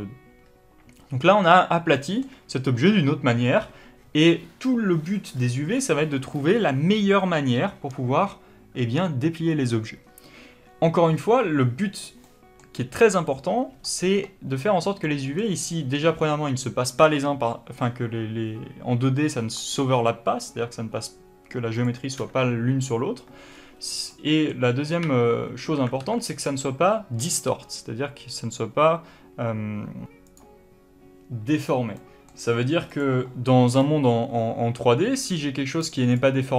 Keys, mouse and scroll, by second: 1.9-18.9 middle drag, 21.6 click, 23.4 scroll up 1, 24.0 middle click, 24.9 1, 25.9 alt+a, 32.0 middle click, 33.0 click, 33.7 click, 35.3 3, 35.7 click, 36.2 click.